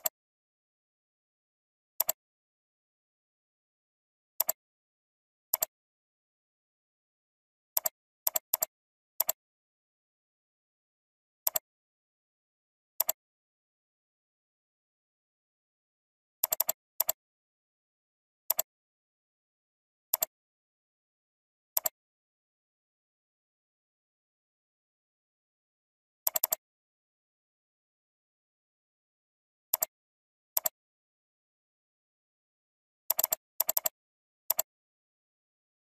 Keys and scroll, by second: 16.4 alt+space, 25.9 ctrl+g, 31.7 ctrl+g.